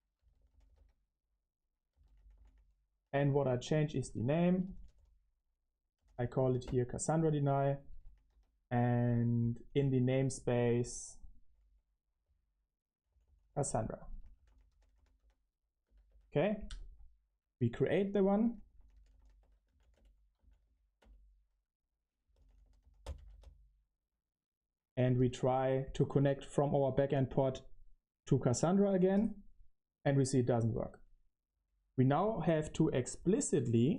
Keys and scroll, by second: 0.0-25.4 typing, 26.0 Return, 31.7 typing.